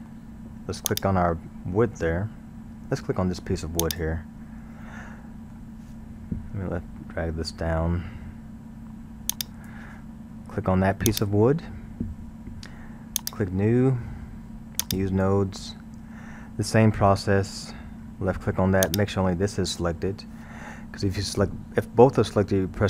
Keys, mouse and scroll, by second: 0.9 click, 3.8 click, 5.2-8.0 middle drag, 8.0 scroll, 9.3-11.3 drag, 13.2-13.6 drag, 14.8 click, 16.5 scroll, 17.1-18.9 middle drag, 18.9 click.